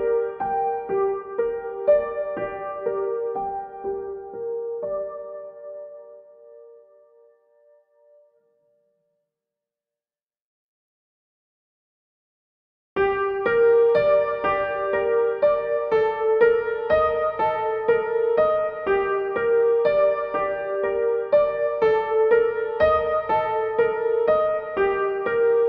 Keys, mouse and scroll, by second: 4.3-10.6 drag, 10.6 right click, 11.8-18.6 drag, 18.6-23.2 shift+drag, 24.2 ctrl+g.